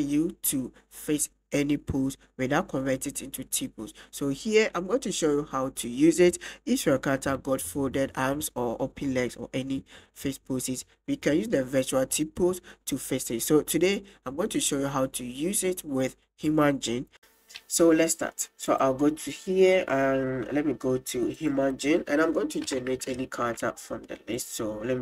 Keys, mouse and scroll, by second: 2.6 click, 2.9 middle click, 3.4 right click, 4.0 click, 4.2 middle click, 5.0-7.0 drag, 7.2 click, 8.2-8.5 drag, 8.9-10.2 drag, 12.8 click, 17.2 a, 17.2 x, 18.7 click, 21.4 click, 21.7 middle drag, 23.2 shift+middle drag, 23.7 middle click, 24.4-25.0 drag.